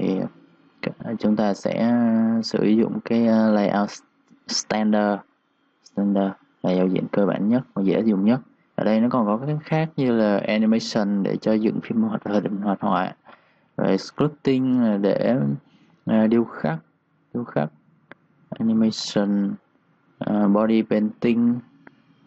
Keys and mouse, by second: 7.6 click, 17.3 click.